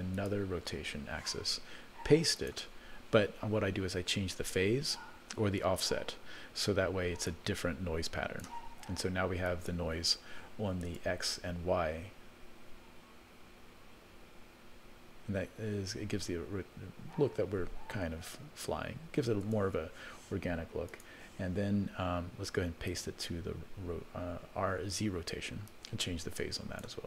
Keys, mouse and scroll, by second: 0.2 click, 2.3 click, 7.2-8.5 drag, 9.4 click, 10.8 space, 19.4 space, 20.9-22.4 drag, 22.9 click, 25.7-26.8 drag.